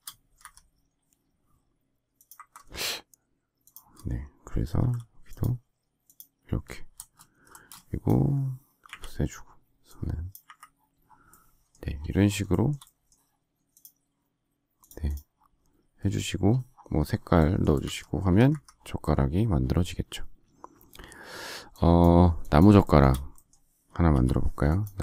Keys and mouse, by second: 0.3 shift+Escape, 7.4 space, 7.8 click, 8.8 Delete, 10.4 Delete, 17.6 space, 17.7 Escape, 18.2 Escape, 18.6 Escape, 24.0 m.